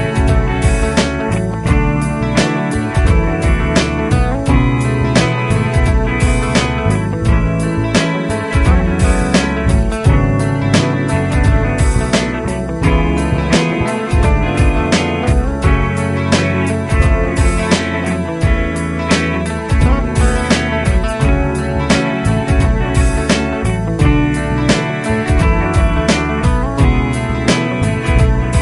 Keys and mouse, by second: 7.2-8.4 Right, 12.8 shift+click, 28.3 shift+click.